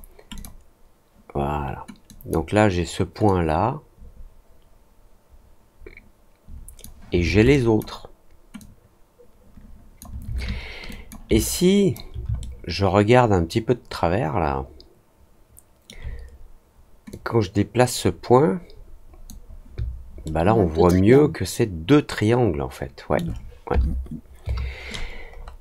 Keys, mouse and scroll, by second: 0.3 click, 2.0 click, 3.2-6.7 drag, 7.4 click, 8.5-9.9 drag, 10.8 click, 11.3 alt+click, 12.3-15.8 alt+middle drag, 17.0-19.2 drag, 20.2-23.1 alt+middle drag, 25.3 scroll down 1.